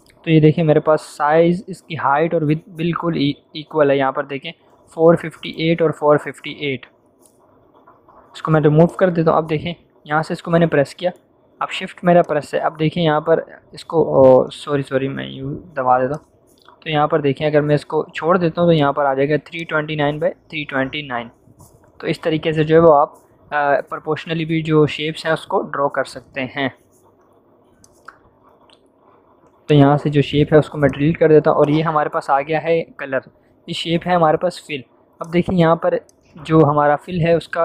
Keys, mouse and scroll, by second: 6.9 v, 8.8 click, 9.7 m, 12.2-14.0 shift+drag, 14.6 ctrl+d, 16.0-17.9 shift+drag, 25.7 v, 26.0 click, 35.2 click.